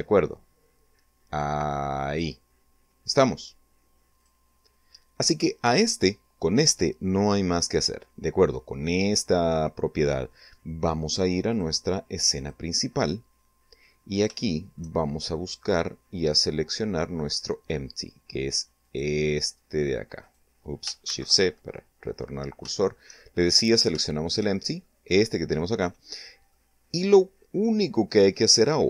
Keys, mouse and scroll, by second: 3.6 click, 10.3 click, 11.2 click, 12.5-13.0 scroll down 1, 13.2 shift+middle click, 14.1-16.4 middle drag, 17.6 click, 18.1-18.7 scroll up 1, 19.0 right click, 19.8 shift+c, 20.4 shift+scroll up 3, 21.5 shift+middle click, 22.6 shift+scroll up 2, 22.8 shift+middle click, 25.3 middle click, 28.2 click.